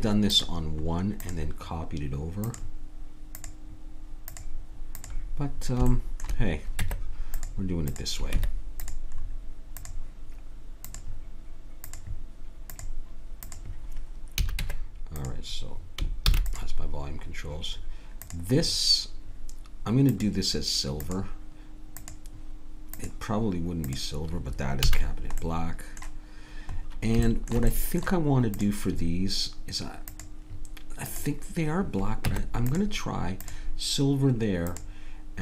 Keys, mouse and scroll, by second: 6.6 click, 6.8 Tab, 7.9 click, 8.4 Tab, 8.5 click, 11.6-15.5 drag, 14.4 a, 14.7 Tab, 16.3 ctrl+s, 18.3-21.8 drag, 22.0-24.7 drag, 24.8 a, 28.6-31.8 drag, 28.6 right click, 32.2 Tab, 32.7-35.4 drag.